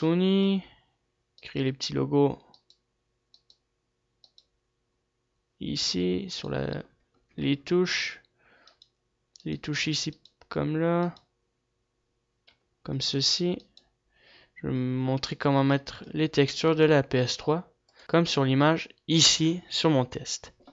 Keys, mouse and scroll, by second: 0.9 a, 2.1-6.2 right drag, 6.2 g, 7.2-10.1 middle drag, 10.1-13.2 right drag, 12.8 g, 13.5-15.5 right drag, 15.5-16.8 middle drag, 16.8 ctrl+s, 17.1-17.5 middle drag.